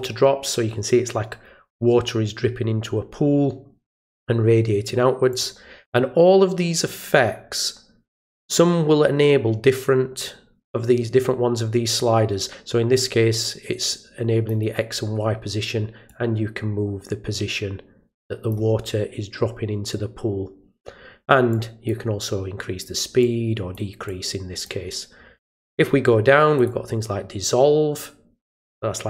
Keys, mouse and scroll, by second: 5.3 click, 13.9 click, 16.0-18.5 drag, 21.5 click, 23.2-23.7 drag, 24.0 click, 25.4 click, 26.5 click.